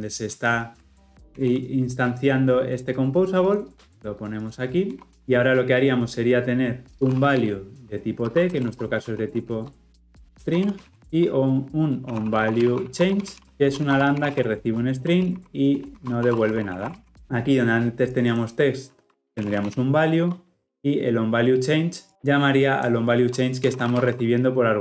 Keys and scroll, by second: 1.3 ctrl+x, 5.2 ctrl+v, 17.0 Escape, 17.1 ctrl+alt+o, 20.1 Escape.